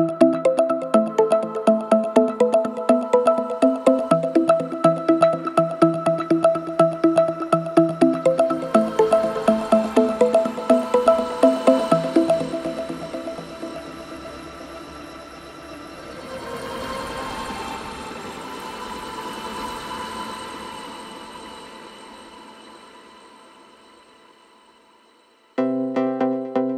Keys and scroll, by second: 0.0 ctrl+z, 4.3 4, 6.8 3, 7.3 ], 8.6 4, 14.6 2, 14.9 ], 16.1 4, 19.4 3, 23.6 4, 24.1 2, 26.2 4.